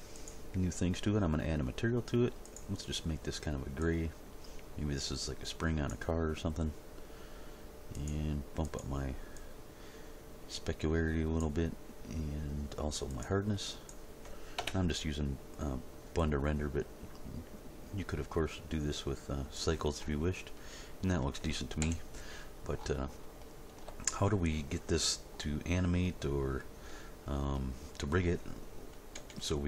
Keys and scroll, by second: 14.6 Return, 21.8 End, 29.1 End.